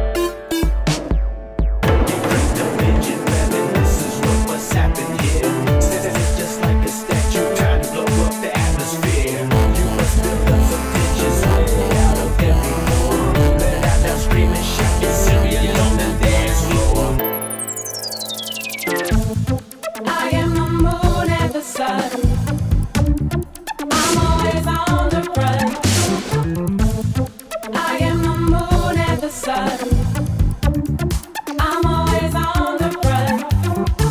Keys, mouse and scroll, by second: 0.2 click, 0.3 click, 5.9 click, 6.1 click, 7.7 click, 8.0 click, 9.6 click, 15.6 click, 17.0-17.3 drag, 17.9 click, 18.3 click, 19.2 click, 20.7 click, 21.8 click, 22.8 Right, 23.0 Right, 23.1 Right, 23.2 Right, 23.3 Right, 23.5 Right, 23.6 Right, 24.1 Right, 24.3 Right, 24.5 Right, 24.6 Right, 24.8 Right, 25.2 Right, 25.5 Right, 26.2-27.4 typing, 28.5-29.5 typing, 29.8 Return, 31.1 click, 31.8 click, 32.1 click, 32.5-33.5 typing.